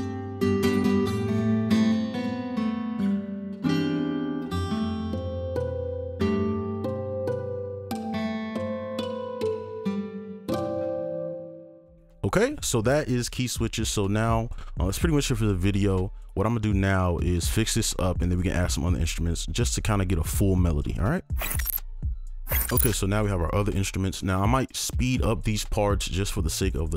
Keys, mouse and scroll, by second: 11.3 space.